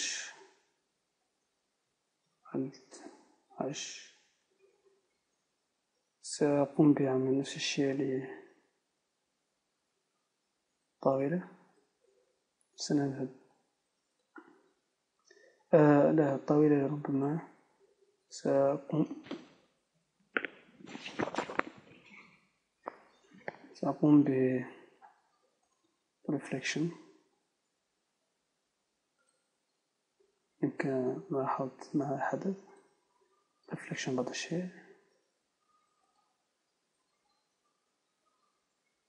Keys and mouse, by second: 1.3 Tab, 3.7 alt+h, 5.2 KP_0, 7.4-9.0 right drag, 9.0 Tab, 14.5-27.4 drag, 27.6 click, 28.2 click, 29.3 click, 30.3 click, 33.1 click, 34.1 click, 34.3 click, 34.7 click, 34.9 click, 35.2 click, 35.5 click.